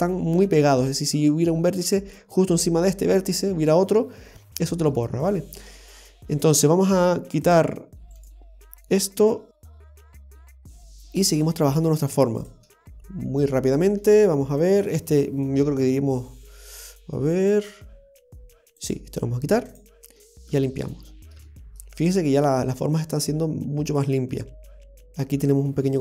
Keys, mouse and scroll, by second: 1.8 scroll up 2, 4.9 scroll up 2, 6.1 scroll down 1, 6.1-6.6 scroll down 1, 7.4 click, 8.1 right click, 9.2 x, 10.2 scroll down 2, 11.1 right click, 12.1 x, 12.7-13.2 scroll down 1, 13.2 shift+middle click, 18.8 right click, 19.6 x, 20.2-20.5 scroll down 3, 20.5 shift+middle click, 21.0-21.4 scroll up 3, 21.4 shift+middle click, 23.0 middle click.